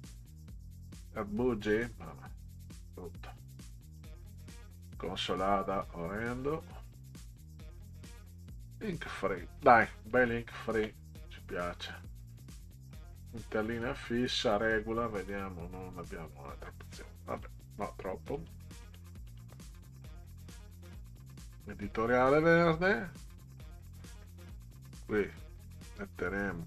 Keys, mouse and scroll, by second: 2.5 click, 2.9 scroll down 2, 3.9 click, 6.2 click, 7.7 click, 12.0 click, 13.0 click, 13.7 click, 14.4 click, 15.3 click, 16.7 click, 18.4 click, 18.8 click, 19.3 click, 21.3 click, 25.2 click.